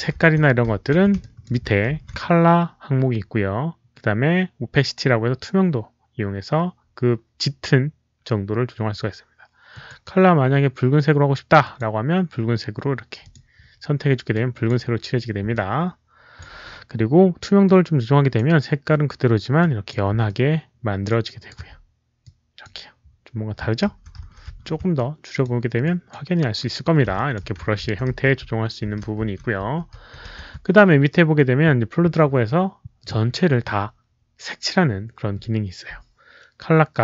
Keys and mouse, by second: 0.6 ctrl+z, 1.1 alt+click, 1.8 ctrl+z, 2.5 ctrl+z, 2.5 alt+click, 9.6 click, 9.8 ctrl+z, 11.5 alt+click, 13.1 click, 14.2 click, 15.5 alt+click, 17.5-18.3 alt+drag, 19.5 alt+click, 20.2 alt+click, 21.1 alt+right click, 22.1 alt+click, 24.1 ctrl+z, 24.1 alt+click, 24.1 alt+right click, 24.9 alt+click, 25.7 click, 27.1 alt+click, 27.8 ctrl+z, 28.3 ctrl+z, 28.3 alt+click, 29.1 ctrl+z, 29.1 alt+click, 29.8 ctrl+z, 34.5 ctrl+z.